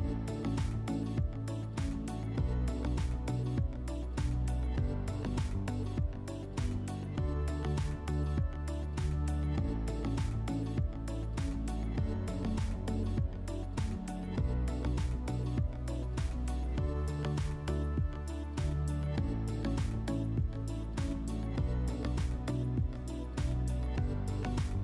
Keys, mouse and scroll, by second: 0.7 click, 1.6 ctrl+click, 3.4 click, 4.3 click, 6.0 ctrl+click, 9.5 click, 11.4 click, 12.0 click, 20.7 alt+middle click, 24.1-24.8 drag.